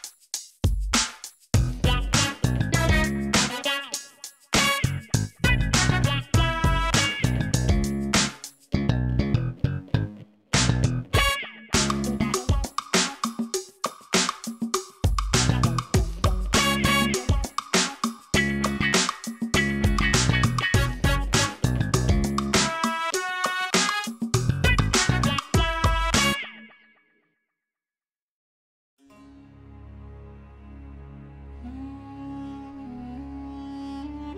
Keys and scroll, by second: 2.2 e, 4.9 i, 6.2 e, 10.7 ctrl+i, 19.6 Tab, 28.4 alt+a, 30.5 Tab, 31.0 1, 31.2 shift+z, 32.0 g, 32.2 z, 33.3 Tab.